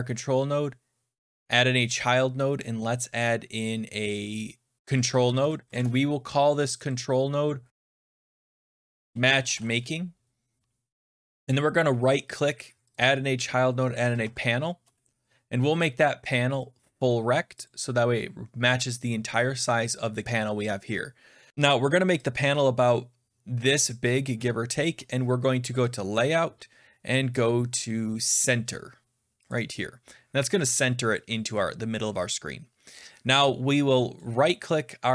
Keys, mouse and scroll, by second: 1.3 click, 5.0 Down, 5.1 Down, 5.3 Down, 5.7 Up, 5.7 Return, 6.8 click, 7.7-8.3 scroll down 7, 8.1-9.9 typing, 9.5 scroll, 11.4 click, 12.8-14.7 typing, 12.8 right click, 16.2 click, 17.6 click, 19.6 click, 19.8 typing, 24.7 shift+click, 25.8 click, 29.4 click, 34.1 middle click.